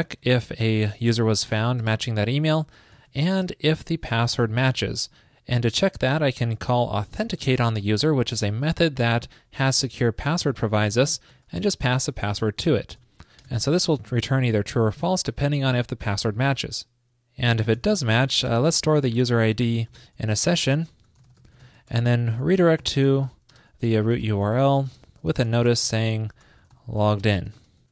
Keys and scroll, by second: 11.8 ctrl+p, 22.0 super+Return.